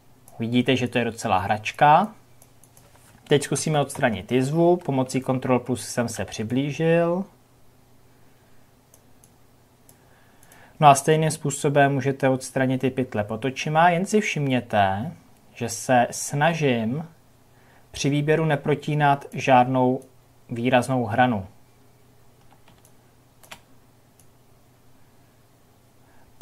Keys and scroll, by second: 3.5 ctrl+KP_Add.